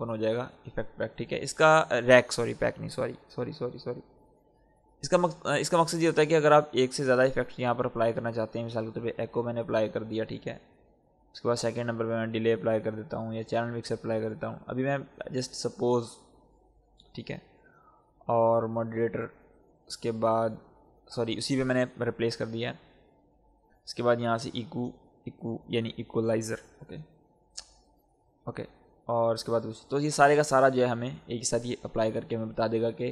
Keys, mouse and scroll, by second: 4.9-14.0 drag, 23.4 click, 26.5 click.